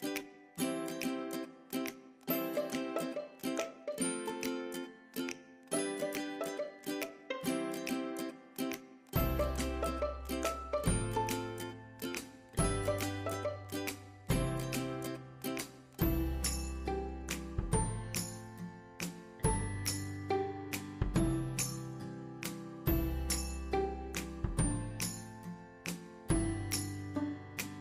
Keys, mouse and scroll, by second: 1.4 click, 9.5 typing, 11.6 scroll down 1, 11.6 typing, 14.9 alt+scroll down 1, 15.1 typing, 17.0 scroll up 1, 17.0 typing, 21.4 click, 25.6 typing.